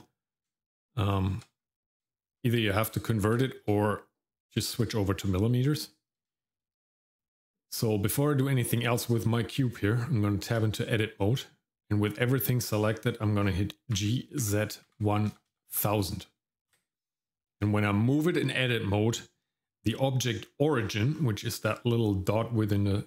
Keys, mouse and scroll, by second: 0.5 shift+middle click, 1.1 shift+middle click, 2.0 shift+middle click, 3.4 shift+middle click, 4.6 shift+middle click, 4.9 middle click, 5.2-6.3 scroll up 1, 6.3 shift+middle click, 6.9 middle click, 9.2 shift+middle click, 10.6 Tab, 11.4 middle click, 13.9 g, 20.8-23.0 scroll up 4.